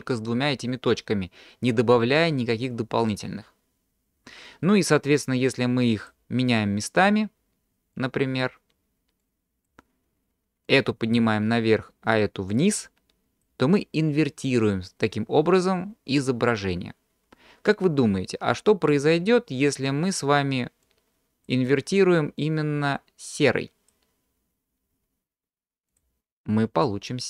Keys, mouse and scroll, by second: 5.6 click, 8.0 drag, 9.2 click, 10.7-11.7 drag, 12.6-13.6 drag, 21.0 click, 22.4 click, 26.1 click.